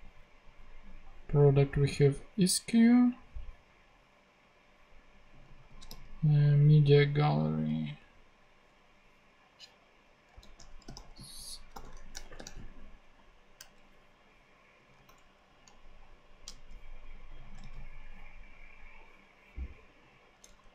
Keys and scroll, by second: 5.6 super+c, 5.9 super+f, 6.2 super+g, 10.4 super+f, 10.7-12.7 typing, 15.3 super+Left, 17.6 super+c, 20.6 Down.